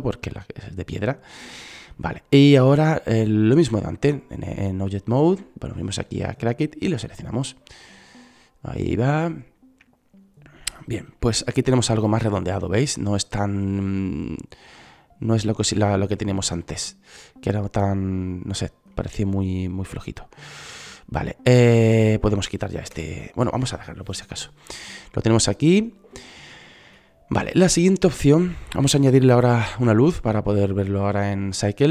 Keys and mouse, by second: 4.2-6.1 right drag, 6.9-8.5 drag, 11.3-13.1 drag, 13.6-18.3 drag, 19.1 click, 20.2 middle click, 20.8-22.3 right drag, 23.2 Delete, 26.7 middle click, 28.4-29.9 middle drag, 29.9 shift+a.